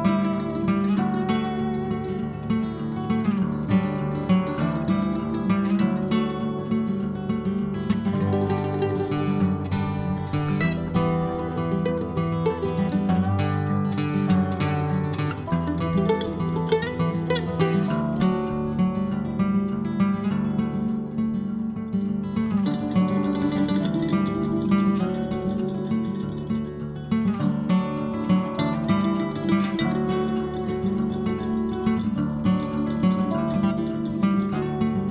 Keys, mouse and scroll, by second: 3.3-4.6 middle drag, 4.6 c, 9.2 scroll down 2, 9.4-10.9 middle drag, 11.4 click, 12.2-13.7 drag, 16.3 l, 21.9 click, 22.9-24.4 middle drag, 25.5 click, 25.9 click, 26.6 click, 27.1-28.6 middle drag, 29.0-31.6 drag, 31.6-33.2 middle drag, 34.0 middle click, 34.3-35.1 scroll up 1.